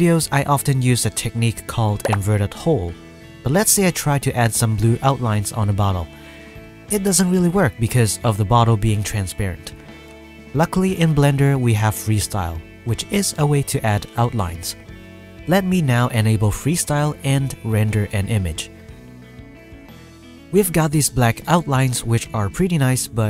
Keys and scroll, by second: 11.5 KP_0.